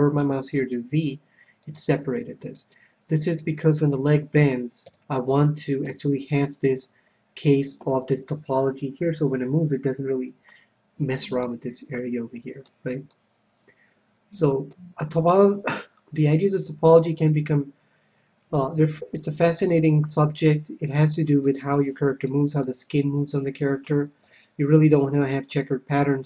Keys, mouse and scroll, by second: 1.0 v, 2.1-3.8 drag, 2.9-6.1 right drag, 5.2 f, 6.2 a, 11.7-15.1 middle drag, 15.6 KP_3, 16.6-19.5 middle drag, 20.9-24.6 middle drag, 24.6 KP_3, 25.9-26.2 middle drag.